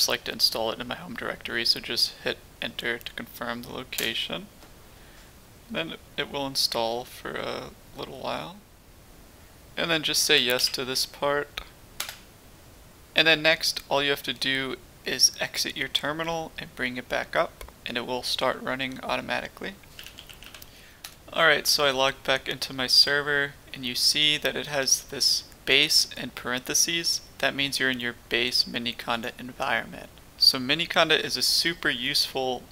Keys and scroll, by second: 3.9 Return, 10.1-11.0 typing, 12.0 Return, 13.4 typing, 19.7-22.2 typing.